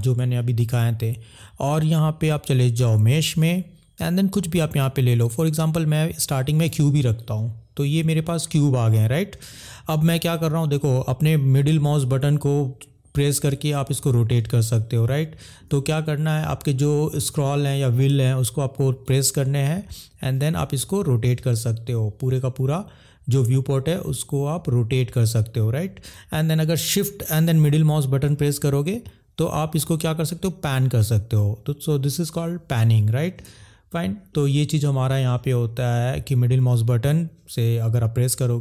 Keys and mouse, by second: 18.9 middle click, 27.7 shift+middle click, 34.2 middle click.